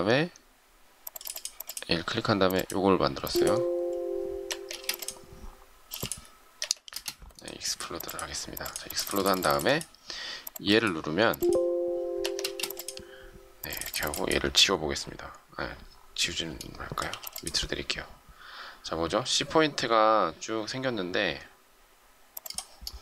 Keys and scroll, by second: 4.2 Escape, 4.6 space, 5.8 m, 6.5 Escape, 6.8 space, 12.1 Escape, 12.3 space, 17.0 m.